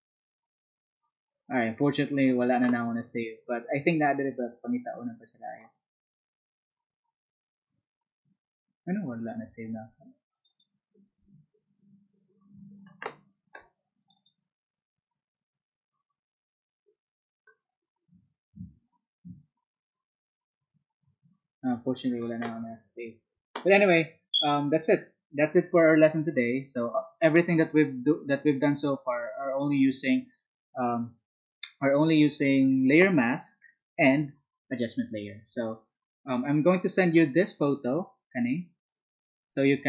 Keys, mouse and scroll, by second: 5.6 click, 10.3 click, 24.7 click, 39.5 click.